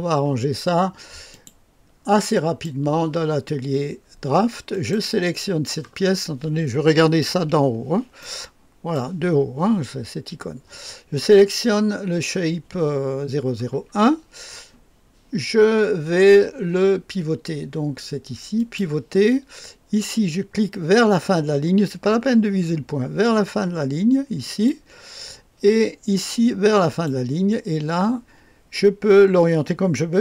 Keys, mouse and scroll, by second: 1.3 click, 2.4 click, 4.7 click, 7.3 KP_2, 8.2 right click, 18.6 click, 24.4 click, 25.1-27.4 drag.